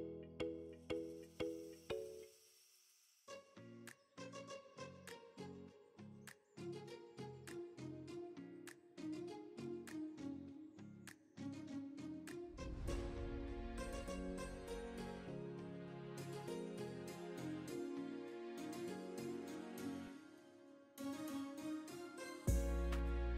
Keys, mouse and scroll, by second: 1.9 click, 4.9 click, 5.9 click, 7.1 click, 8.5 e, 15.1 ctrl+z, 17.7 click, 21.7 e.